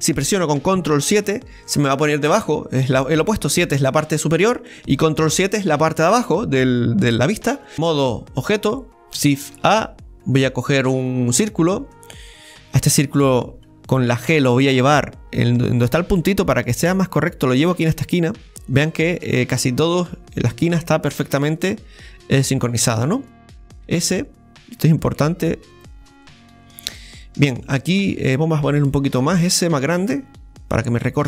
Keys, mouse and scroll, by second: 1.2 ctrl+KP_7, 7.1-7.5 scroll up 2, 7.7 Tab, 22.6 scroll down 1, 23.8 s, 26.1 scroll up 1, 26.8 scroll up 5, 26.9-29.2 shift+middle drag, 29.2 s.